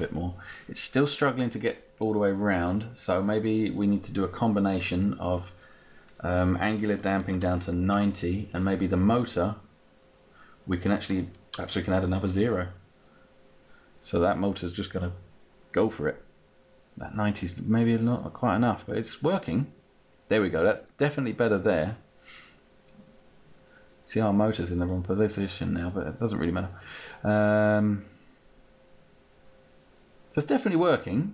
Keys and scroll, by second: 7.5 0, 8.0 Return, 11.6 0.